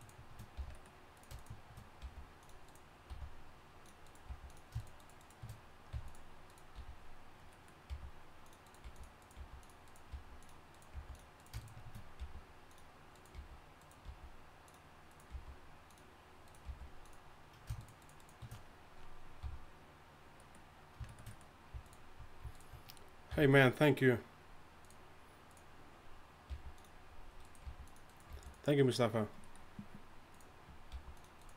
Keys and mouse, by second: 0.6 f, 0.8-5.1 drag, 2.0 g, 3.1 g, 4.3 g, 5.1 shift+right click, 5.9 f, 6.8 f, 7.9-11.0 typing, 12.2 g, 13.2 right click, 14.0 g, 15.3 g, 16.7 g, 19.4 f, 23.3 f, 26.5 g, 27.6 g, 28.3 g, 30.9 g.